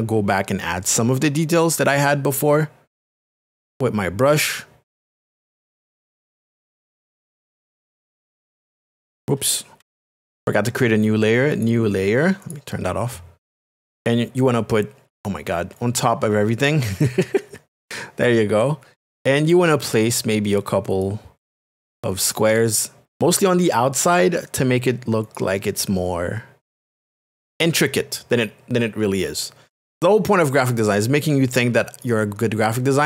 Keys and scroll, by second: 9.8 ctrl+z.